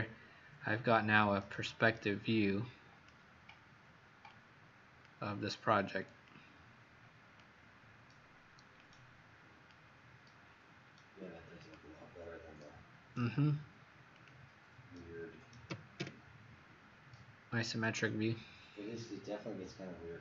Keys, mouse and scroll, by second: 2.0 click, 15.7 KP_0, 15.9 KP_Enter, 17.7 click.